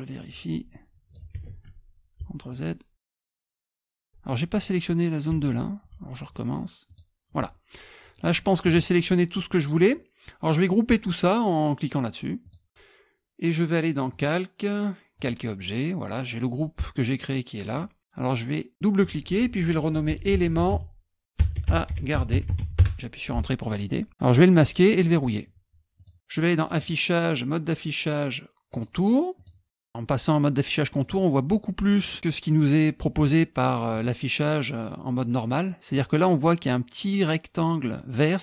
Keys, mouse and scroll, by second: 0.2 click, 1.3 ctrl+z, 2.5 shift+click, 2.9-4.0 drag, 5.3 ctrl+z, 6.9 shift+click, 9.3 middle click, 12.4 click, 14.1 click, 15.2 click, 17.7 click, 19.7-23.1 typing, 24.5 click, 25.1 click, 26.0 click, 26.8 click, 28.7 click, 29.4 click, 31.0 middle click, 32.1 middle click, 33.9 click, 35.9 click.